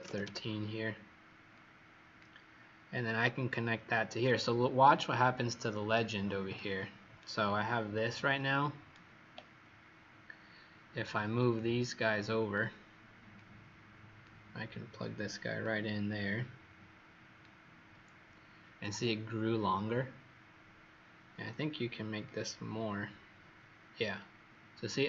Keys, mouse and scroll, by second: 0.1 KP_Enter, 1.5 click, 7.1 right click, 11.5 click.